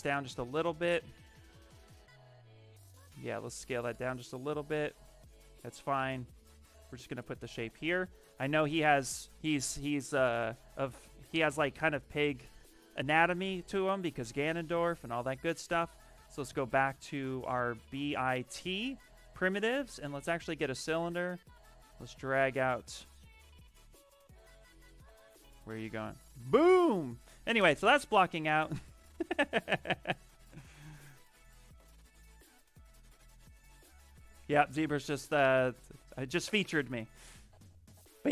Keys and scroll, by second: 7.1 q, 11.2 i, 16.0 b, 16.8 t.